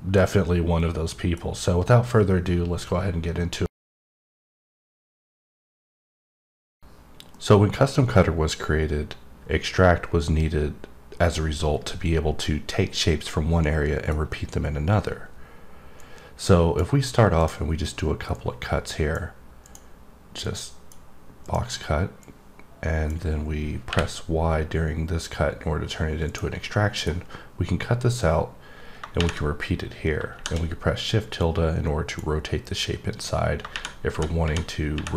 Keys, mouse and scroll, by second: 0.8 middle click, 16.0 click, 17.4 click, 18.3 click, 19.6 click, 20.4 click, 21.4 click, 22.2 click, 26.2 click, 26.6 middle click, 28.1-32.5 drag.